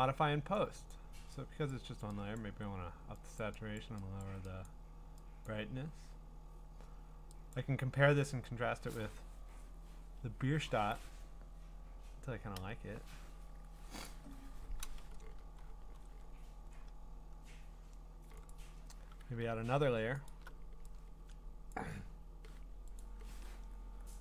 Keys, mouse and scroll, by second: 0.9 click, 1.7 click, 2.4 click, 3.4 click, 3.8 click, 4.2 click, 4.7 click, 5.5 click, 7.5 click, 12.6 Return, 18.5 click, 20.3 alt+click, 21.7 click, 23.0 click.